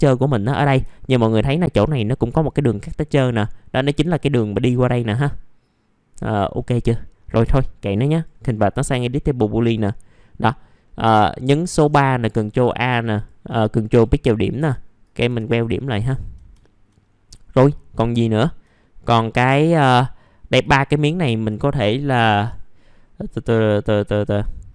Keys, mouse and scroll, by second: 0.3 middle click, 0.9 alt+middle click, 2.1-6.0 scroll up 1, 6.5-7.0 scroll down 1, 7.0 middle click, 7.2-8.1 scroll down 1, 8.1 right click, 9.6 click, 10.2 middle click, 10.4-10.8 scroll down 1, 10.8 middle click, 13.1 ctrl+click, 13.8 right click, 15.6 scroll down 1, 15.7 alt+middle click, 16.6 alt+middle click, 17.0-17.3 scroll down 1, 17.3 scroll up 1, 17.8-18.1 scroll down 1, 18.2 alt+middle click, 19.2 scroll up 1, 19.7 click, 20.2 middle click, 20.6 click, 21.1 alt+middle click, 21.5-22.0 scroll up 1, 22.3 F4, 22.7 middle click, 23.4 scroll down 1, 23.8 ctrl+middle click.